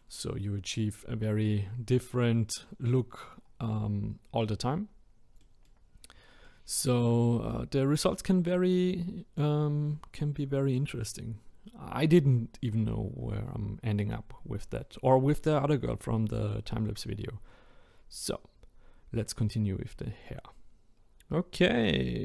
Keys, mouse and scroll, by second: 1.7-2.1 scroll up 2, 3.4-4.4 scroll down 2, 4.4-4.9 middle drag, 4.9 scroll up 1, 5.4-5.9 middle drag, 5.9-6.4 scroll down 2, 6.4-10.4 middle drag, 16.4-17.0 middle drag, 17.0-17.7 scroll down 1, 17.7-19.4 scroll up 1, 20.9-22.2 middle drag.